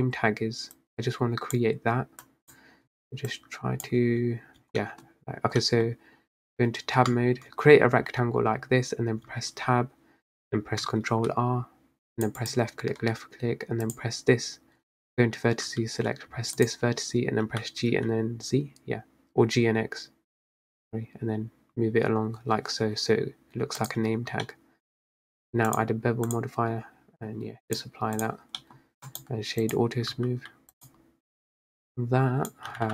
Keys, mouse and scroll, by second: 0.8 click, 2.3 click, 3.3 click, 4.1 Tab, 4.7 Tab, 4.9 middle click, 5.2-5.7 scroll up 1, 5.7-7.1 middle drag, 7.1 Tab, 7.6 Tab, 9.4 Tab, 11.2 ctrl+r, 14.0 click, 16.7 click, 17.5 g, 24.1 Tab, 24.5-25.2 middle drag, 25.2-25.8 scroll down 1, 26.4-28.7 drag, 28.7 middle drag, 28.9 scroll down 2, 29.2-30.2 right drag, 30.2 s, 31.9 click, 32.8 g.